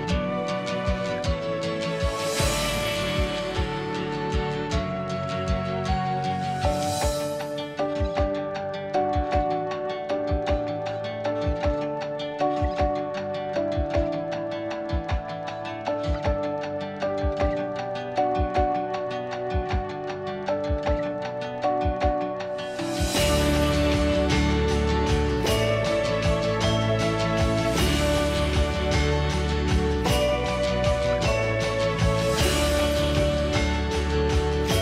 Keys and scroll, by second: 5.9-6.6 typing, 8.5 BackSpace, 8.6 BackSpace, 8.8 Return.